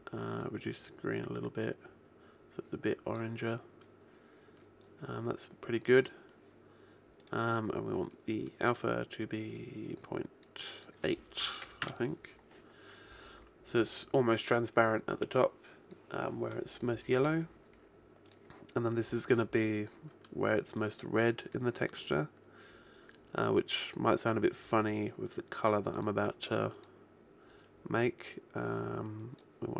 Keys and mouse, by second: 7.2 click, 18.3 click, 20.8 click, 26.0-28.6 drag.